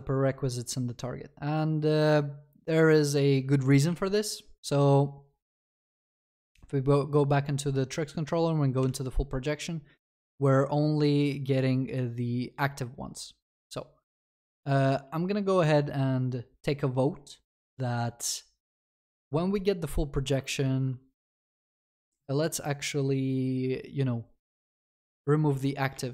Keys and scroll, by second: 8.9 ctrl+b, 20.6 ctrl+c.